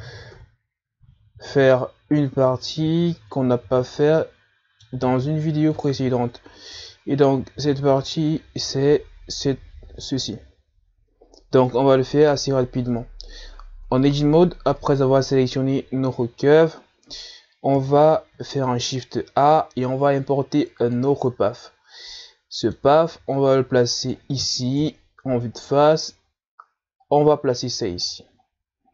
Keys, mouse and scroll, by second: 1.7 KP_Divide, 4.7-5.1 scroll up 2, 5.3-7.0 middle drag, 7.0 click, 12.9-14.6 middle drag, 14.6-15.1 scroll down 5, 15.1 Tab, 16.8 Tab, 17.5 Tab, 18.1-19.0 scroll down 2, 19.0 KP_1, 19.8 shift+a, 23.4-24.6 middle drag, 24.6-26.0 drag, 26.0 KP_1, 27.0-27.5 scroll up 2, 28.2-28.9 drag.